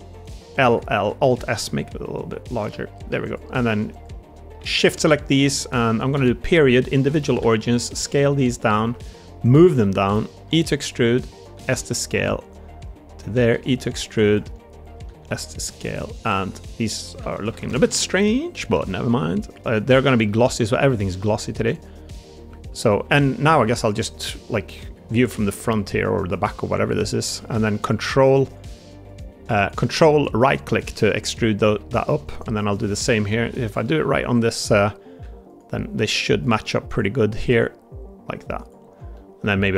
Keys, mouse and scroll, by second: 0.5 l, 1.4 alt+s, 1.4 l, 2.6 middle click, 2.8 click, 3.0 3, 4.2 shift+click, 4.7 shift+d, 6.0 ., 7.3 s, 11.2 e, 14.4 click, 14.4 s, 16.3 click, 16.3 s, 18.0 ctrl+KP_Add, 18.6 a, 18.8 g, 19.8 click, 20.2 middle click, 20.8 shift+middle click, 21.1 middle click, 22.7 middle click, 23.7 KP_1, 24.1 KP_3, 24.7 KP_1, 31.2 middle click, 33.0 KP_3, 33.5 ctrl+KP_1, 39.0 middle click.